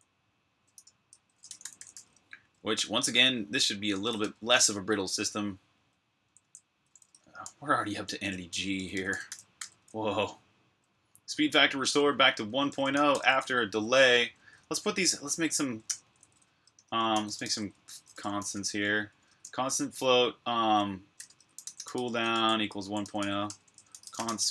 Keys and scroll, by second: 0.0-0.6 typing, 2.2-4.8 typing, 11.9-16.7 typing, 20.7-24.5 typing.